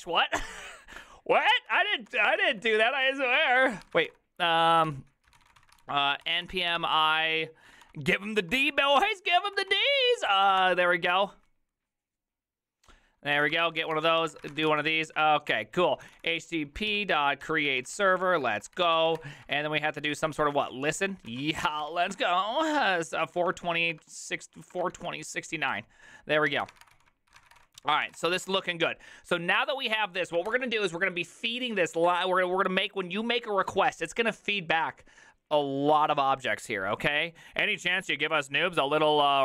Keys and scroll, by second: 0.4-11.0 typing, 1.7 Up, 2.1 Return, 13.1-28.6 typing, 17.5 Tab, 17.8 Return, 21.3 ctrl+y, 30.5 alt+f.